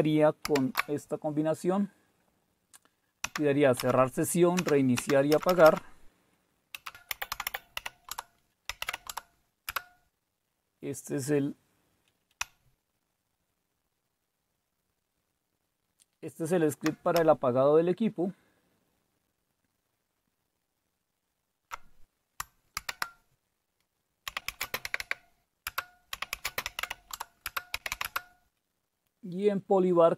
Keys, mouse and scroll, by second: 0.5 shift+super+x, 3.2 Down, 3.8 Up, 4.6 Down, 5.0 Down, 5.3 Up, 5.4 Up, 5.7 Up, 6.7 Escape, 6.8-9.2 typing, 9.7 Return, 12.5 Down, 12.9 Down, 13.0 Down, 17.1 Up, 17.6 Up, 17.7-22.7 Up, 22.7 ctrl+x, 24.1-28.4 typing.